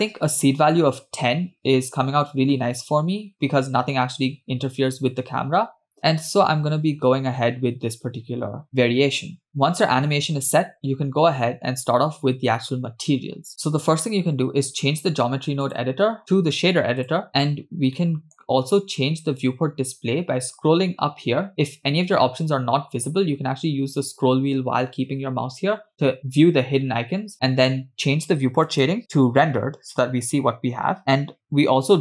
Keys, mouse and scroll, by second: 9.2 space, 15.7-17.3 drag, 17.6-17.9 scroll down 2, 18.0-19.8 middle drag, 19.9-21.0 scroll down 3, 21.0-21.5 scroll down 2, 23.4 scroll up 2, 24.7-25.8 scroll down 2, 25.8-26.1 scroll up 3, 26.1-26.6 scroll down 1, 29.0 click.